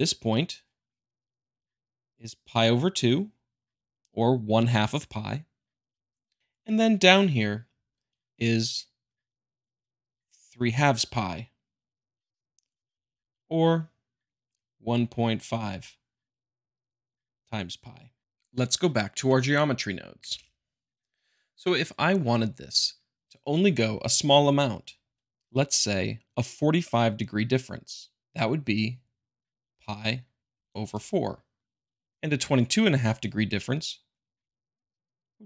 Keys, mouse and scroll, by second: 0.6-1.7 drag, 2.6-3.7 drag, 7.2-8.2 drag, 8.4-9.4 drag, 9.5-10.6 drag, 10.7-11.7 drag, 14.3-15.4 drag, 16.3-17.4 drag, 17.5 click, 20.2 ctrl+space, 27.4 click, 28.6-29.6 drag, 29.7-30.8 drag, 32.1-33.2 drag, 34.5-35.4 drag.